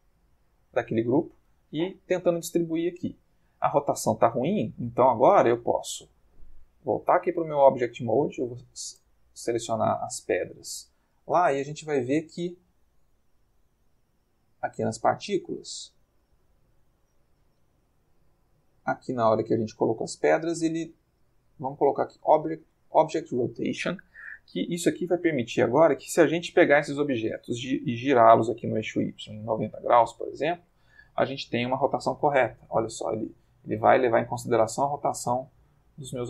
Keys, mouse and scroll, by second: 4.0 shift+middle click, 5.0 ctrl+shift+middle click, 6.2 ctrl+Tab, 7.0 ctrl+click, 8.3-8.9 shift+middle drag, 9.0-10.0 ctrl+shift+middle drag, 10.3-11.0 ctrl+drag, 12.1 middle click, 13.1 click, 15.6 middle click, 16.5 middle click, 17.0-19.5 middle drag, 21.4 click, 24.8-25.6 drag, 28.1 r, 28.6 y, 29.3 9, 29.4 0, 30.2 click, 31.0 ctrl+middle click, 32.4 r.